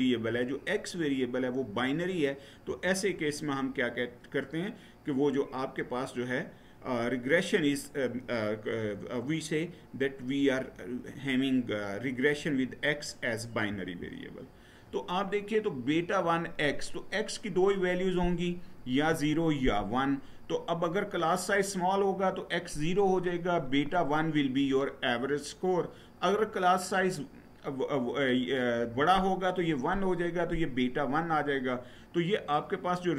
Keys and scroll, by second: 13.5 Down.